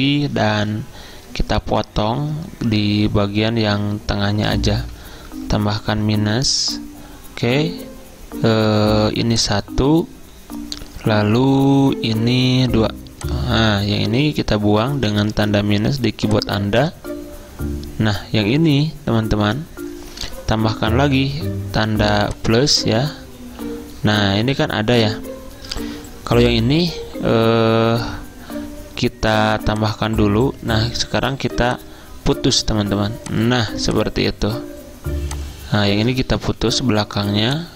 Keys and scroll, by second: 1.1 -, 5.4 =, 15.4 -, 20.7 =, 31.4 a, 36.7 -.